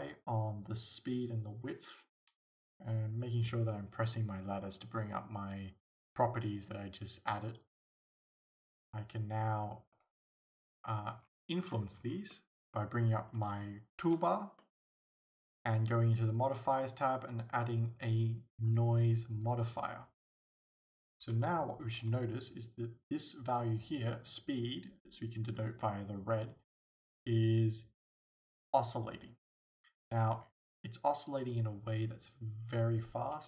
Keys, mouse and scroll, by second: 2.4 right click, 6.0-8.3 middle drag, 8.8-10.0 middle drag, 10.0 click, 10.8 scroll up 2, 12.3-16.4 middle drag, 16.4-33.4 drag, 21.4 alt+a, 21.9 alt+a, 27.0 alt+a.